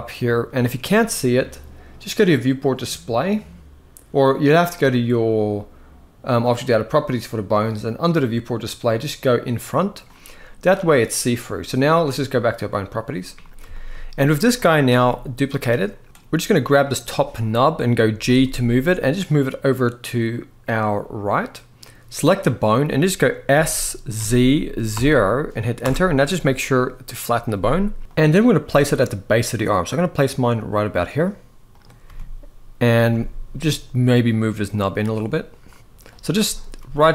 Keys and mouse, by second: 2.0 click, 6.2 click, 9.1 click, 12.4 click, 13.4 shift+middle drag, 14.1 click, 14.6 g, 15.9 shift+middle click, 16.5 click, 17.9 g, 22.1 click, 23.2 s, 28.3 g, 31.8 g, 36.5 g.